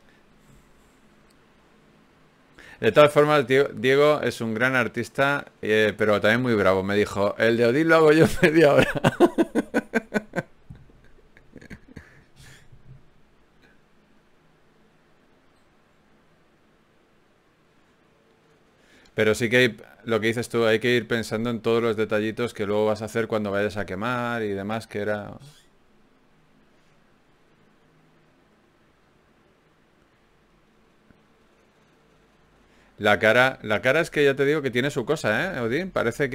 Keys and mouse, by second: 0.3 f, 1.3 f, 6.7 ctrl+r, 8.9 g, 11.4 click, 12.6-17.6 middle drag, 20.5 middle click, 25.2 middle click, 25.6-27.8 middle drag, 29.4 right click, 30.7 right click, 32.9 click, 34.7 ctrl+r, 35.9 click.